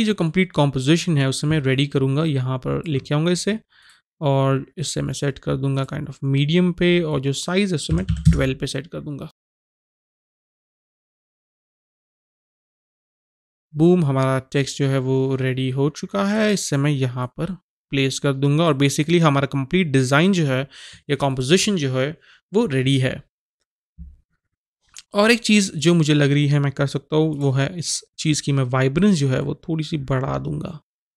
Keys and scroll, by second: 8.1 typing, 9.8-13.2 typing.